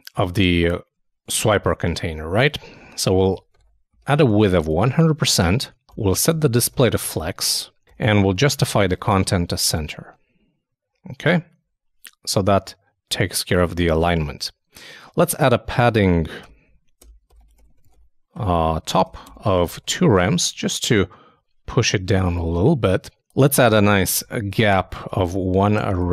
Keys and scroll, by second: 1.9 super+Tab, 3.6-5.4 typing, 9.4 super+Return, 9.5 super+s, 9.7 super+Tab, 15.2 super+Tab, 15.8 super+p, 18.7-19.5 typing, 19.9 super+;, 20.0 super+s, 20.2 super+Tab, 23.1 super+Tab, 24.1-25.0 typing.